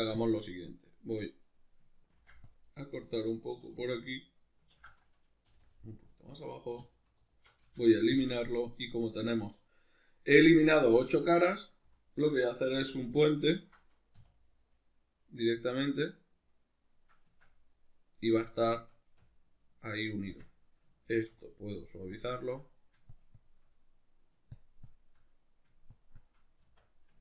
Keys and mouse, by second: 0.5-3.3 middle drag, 2.1 ctrl+r, 3.3 click, 3.6 3, 4.1-11.5 middle drag, 4.8 ctrl+z, 6.2 click, 6.8 3, 7.3 alt+right click, 7.6 x, 11.0 1, 11.1 2, 11.5 right click, 12.0 alt+right click, 12.8 2, 13.5 alt+shift+right click, 14.2 w, 16.1-21.4 middle drag, 17.3 Tab, 18.4 Tab, 19.2 Tab, 21.4-22.6 shift+drag, 22.6 middle click, 23.1 shift+click, 23.7 middle click, 24.5 shift+click, 25.1 middle click, 25.9-26.9 shift+drag, 26.6 Tab, 26.9-27.2 ctrl+middle drag.